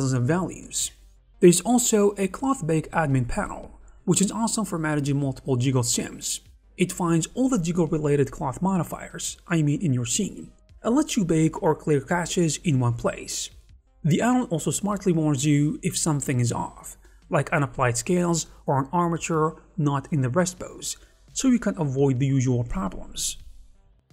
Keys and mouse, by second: 0.4 click, 1.8 click, 2.4 click, 2.8 click, 3.8 click, 4.8 Escape, 5.2 space, 7.0 click, 7.4 space, 9.4 click, 10.6 click, 11.2 click, 12.0 click, 12.6 click, 13.0 r, 13.4 s, 14.2 click, 14.4 r.